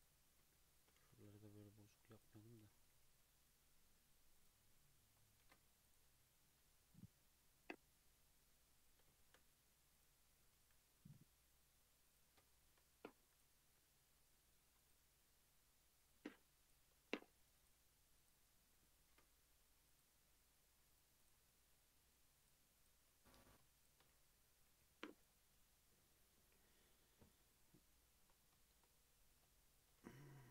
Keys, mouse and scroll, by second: 0.0 click, 0.7 shift+click, 1.1 g, 2.5 click, 2.7 g, 5.5 ctrl+z, 5.9 click, 6.6 g, 7.7 click, 9.2 shift+Tab, 10.0 click, 10.4 g, 12.5 shift+middle click, 13.3 click, 14.8 click, 15.0 g, 17.6 click, 17.8 g, 19.1 ctrl+r, 21.2 click, 21.7 g, 22.8 click, 23.8 shift+click, 24.9 j, 25.2 click, 25.4 Tab, 25.7 scroll down 2, 25.9 Tab, 27.8 shift+middle click, 28.2-28.6 shift+scroll up 3, 28.6 shift+middle click, 29.2 click, 29.6 shift+click, 30.4 j.